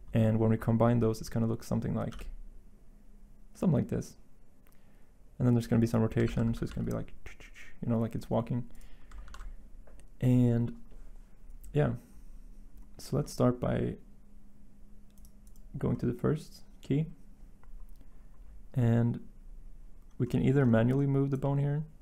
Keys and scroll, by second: 2.0 g, 6.2 ctrl+z, 6.4 r, 6.6 x, 9.2 ctrl+z.